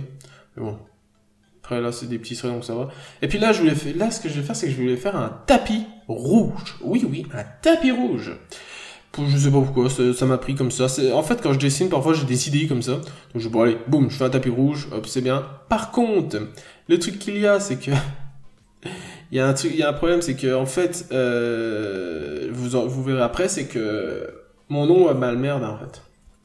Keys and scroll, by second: 0.4 n, 0.9-1.6 scroll down 1, 1.7 scroll up 1, 2.8 scroll down 1, 6.5 ctrl+z, 9.6 ctrl+z, 10.5 ctrl+z, 11.6 ctrl+z, 12.1 scroll down 1, 18.4 ctrl+z, 20.2 ctrl+z, 21.8 ctrl+z.